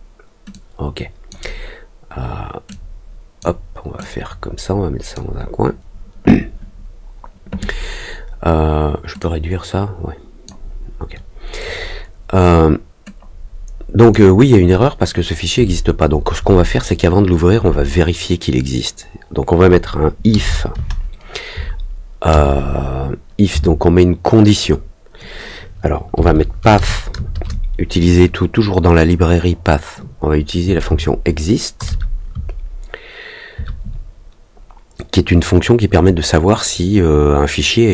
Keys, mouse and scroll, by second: 0.5 click, 2.6 click, 3.9-5.1 drag, 9.1-10.4 drag, 13.9 click.